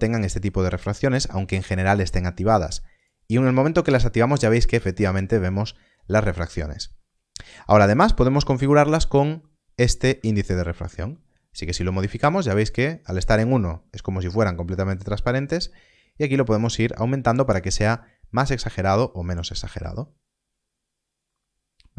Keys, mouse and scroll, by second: 2.9 middle click, 5.8 click, 5.8 scroll up 1, 10.4 shift+click.